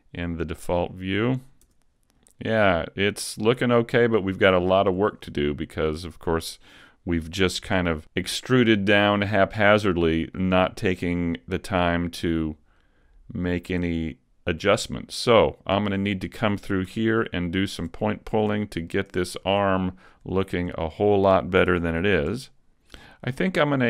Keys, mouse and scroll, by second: 0.0 click, 1.7 Tab, 2.2-2.8 scroll down 2, 2.6 middle click, 4.7 shift+middle click, 5.2 scroll up 1, 5.7 right click, 6.4 Tab, 6.9 middle click, 7.6 scroll up 1, 8.0 middle click, 8.6 middle click, 11.7 right click, 12.8 click, 14.1 middle click, 16.0 scroll up 1, 16.4 scroll down 2, 16.9 a, 17.4 shift+middle click, 18.4 Tab, 18.9 middle click, 19.4 Tab, 19.8 middle click, 20.4 shift+middle click, 21.2 middle click, 21.7 ctrl+Tab, 23.2 scroll down 2, 23.4 middle click.